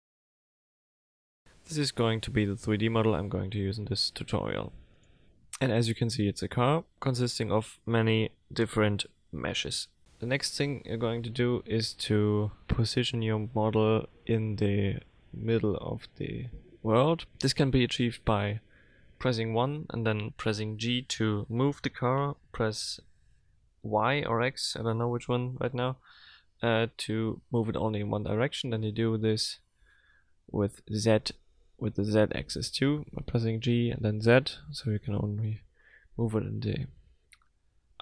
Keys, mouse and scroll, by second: 1.6 l, 2.4 middle click, 4.3 middle click, 11.2 KP_1, 12.7-13.1 scroll up 5, 13.4 shift+middle click, 15.7 g, 24.9-25.7 scroll up 7, 26.4 g, 29.4 scroll down 3, 30.3 g, 33.6 shift+middle click, 34.7-35.3 scroll up 5, 35.6 shift+middle click, 37.7 g.